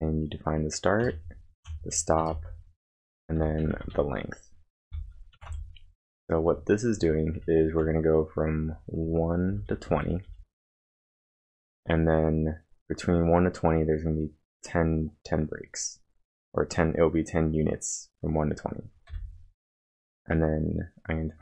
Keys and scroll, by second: 1.0-2.3 typing, 3.4-5.5 typing, 7.0-11.9 typing, 13.4-14.2 typing, 19.1 typing, 20.9-21.4 typing.